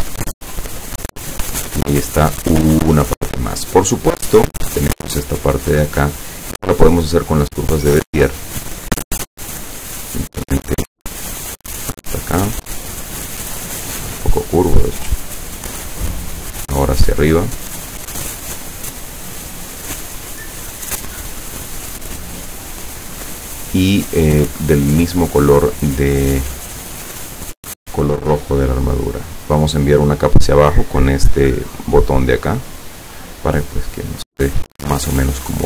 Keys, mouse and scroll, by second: 4.7 click, 10.9 click, 13.7-15.0 drag, 16.3 click, 19.1 click, 21.5 click, 22.8 click, 27.0 click, 27.5 click, 29.0 click, 32.3 click.